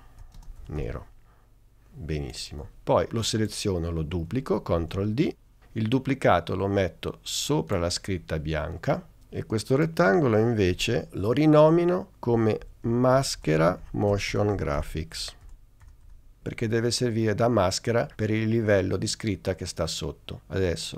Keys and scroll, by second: 0.0-1.5 typing, 4.8 super+d, 9.2 Return, 12.1-16.5 typing.